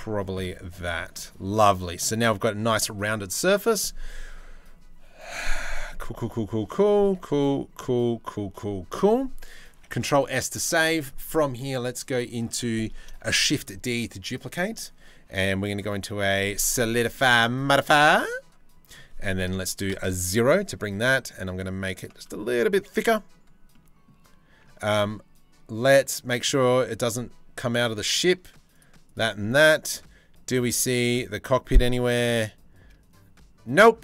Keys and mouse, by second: 0.1 middle click, 0.8 Tab, 4.9-6.4 middle drag, 6.6 shift+middle click, 6.9 middle click, 10.0 ctrl+s, 12.8 shift+d, 15.9 click, 16.8 middle drag, 18.5-21.6 drag, 22.1 shift+middle click.